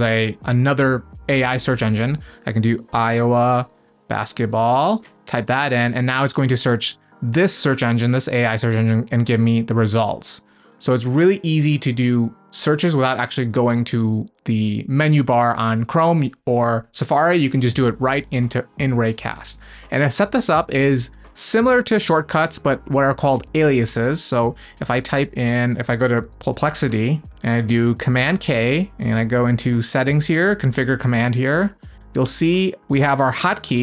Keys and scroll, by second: 5.9 Return, 17.5 super+space.